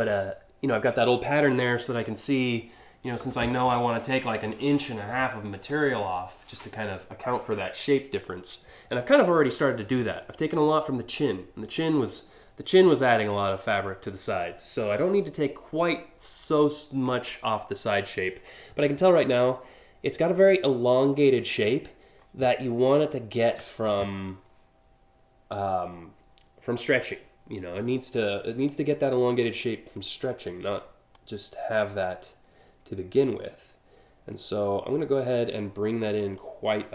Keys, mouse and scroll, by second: 30.7-36.0 drag.